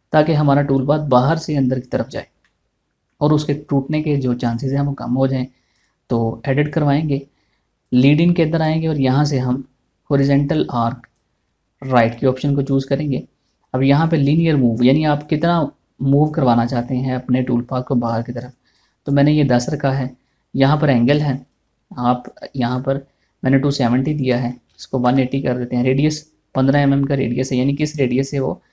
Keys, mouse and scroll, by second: 3.0-6.2 middle drag, 6.3 click, 6.4 click, 12.6 click, 19.3 click, 19.6-24.6 drag.